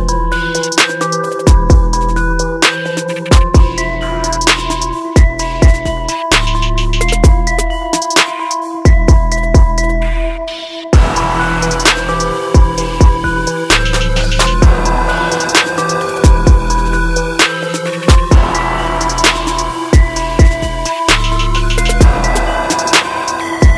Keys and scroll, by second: 0.2 ctrl+-, 0.5 ctrl+0, 2.3 ctrl+j, 3.2 ctrl+t, 14.1 ctrl+t, 19.4 ctrl+t.